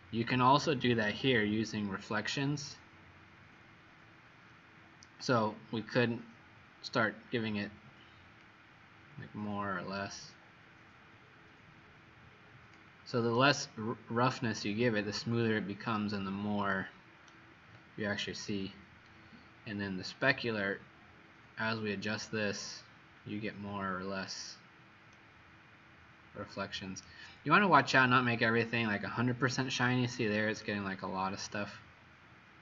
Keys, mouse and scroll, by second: 13.3 right click, 19.0 click, 25.1 right click, 27.7-28.1 scroll down 3, 30.6 right click.